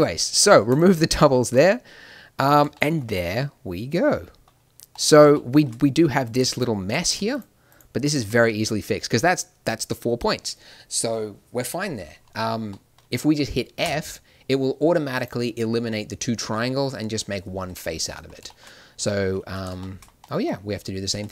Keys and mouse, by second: 1.4 a, 5.0 middle click, 6.2-8.7 drag, 9.5-12.7 drag, 13.8 f, 17.0-18.0 middle drag, 21.2 ctrl+r.